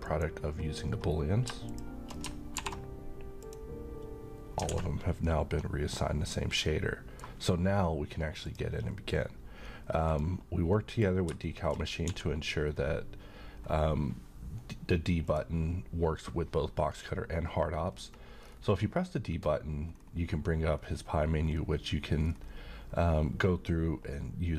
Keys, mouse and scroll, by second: 0.1 click, 2.6 alt+m, 3.4 click, 4.7 alt+a, 5.3-7.4 middle drag, 8.4 click, 10.7 middle click, 12.1 d, 15.3 click, 17.8-19.8 scroll down 1.